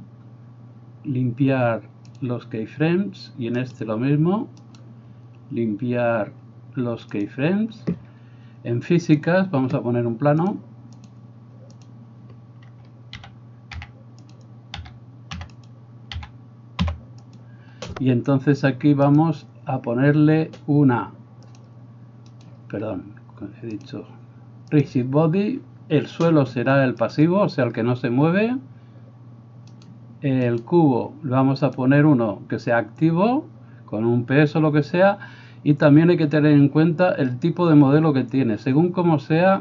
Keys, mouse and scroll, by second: 3.8 middle click, 4.7-29.9 right drag, 9.3-14.4 drag, 9.3-19.3 middle drag, 13.3 g, 14.8 s, 16.3 s, 19.2 click, 21.7-24.1 drag, 21.7-24.1 middle drag, 24.8-39.6 drag, 24.8-29.9 middle drag, 30.6-39.6 middle drag, 30.6-39.6 right drag.